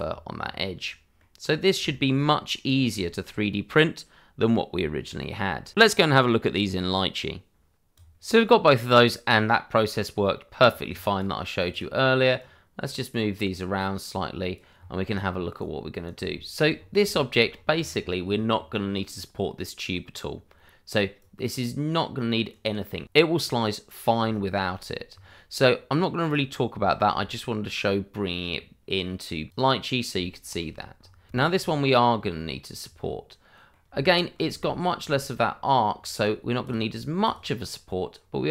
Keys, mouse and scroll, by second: 0.0 scroll down 1, 1.4-1.9 scroll down 1, 2.1 shift+middle click, 2.7 scroll down 1, 3.0 shift+middle click, 5.7-6.3 scroll up 1, 8.2 click, 9.7-11.1 scroll up 1, 11.1 right click, 13.6 double click, 13.7 click, 14.7-15.3 scroll up 1, 15.5 right click, 16.4 shift+middle click, 16.7 scroll up 1, 17.0 shift+middle click, 17.4-17.8 scroll up 1, 21.1 right click, 24.7 shift+middle click, 25.2-26.2 scroll down 1, 26.2 click, 26.8 shift+middle click, 27.6-28.4 scroll down 1, 29.5 click, 29.9 scroll down 1, 30.2 shift+middle click, 30.8 scroll up 1, 31.2 click, 31.3 shift+middle click, 31.5-32.0 shift+scroll up 1, 32.0 middle click, 32.9-33.5 scroll up 1, 33.5 middle click, 36.1 click, 36.7 double click, 37.2 click, 38.1-38.5 scroll up 1.